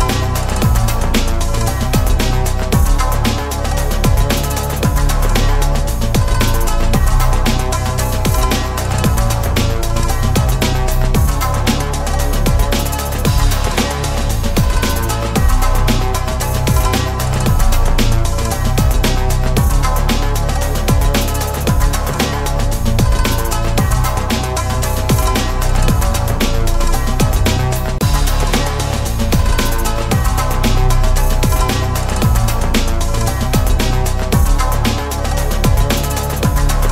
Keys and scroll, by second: 9.5 ctrl+s.